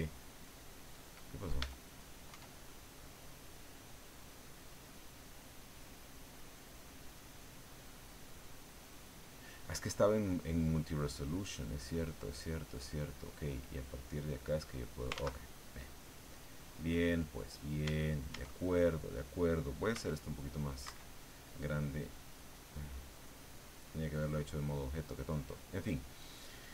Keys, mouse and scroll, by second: 1.6 Tab, 2.3 Tab, 4.8 click, 10.6-12.5 drag, 13.3-15.1 drag, 15.1 ctrl+z, 16.7-17.8 drag, 17.8 Tab, 19.9 s, 20.8 Escape, 22.2 click, 25.3 click.